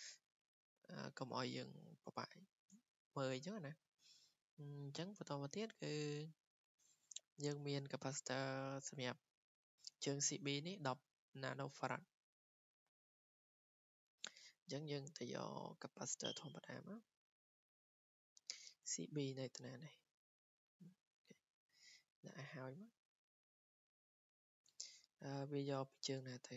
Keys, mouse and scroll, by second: 5.6 click, 6.2 click, 12.8 click, 16.9 click, 20.5 click, 21.0 Escape, 21.8-22.1 scroll, 22.8 w, 23.8 click, 24.4 click, 25.0 Escape, 25.8 click.